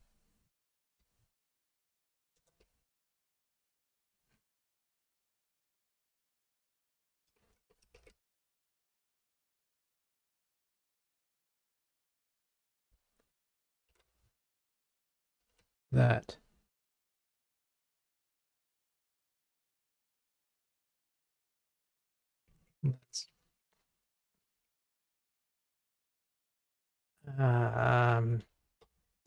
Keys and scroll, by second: 0.9 super+c, 2.9 super+v, 8.7 Escape, 12.6 alt+Up, 13.3 alt+Up, 13.9 super+c, 15.5 super+v, 17.3 super+v, 17.8 super+BackSpace, 27.3 super+BackSpace.